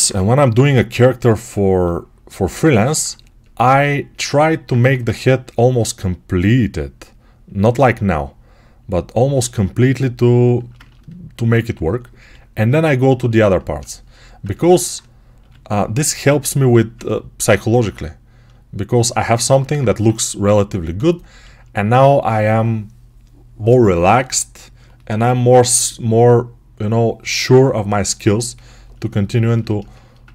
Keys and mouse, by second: 0.0 1, 4.6 1, 12.1 g, 13.0-14.1 ctrl+alt+drag, 14.1-19.0 ctrl+alt+right drag, 15.3 g, 19.0-30.3 alt+drag, 19.9 1.